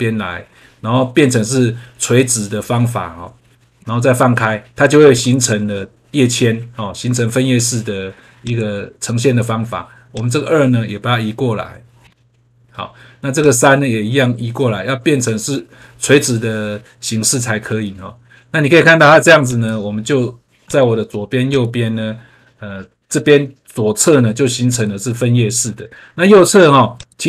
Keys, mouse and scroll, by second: 5.1 click, 8.3 click, 10.1 click, 13.3 click, 19.4 click, 20.6 click, 21.5 click, 24.6 click, 26.9 click.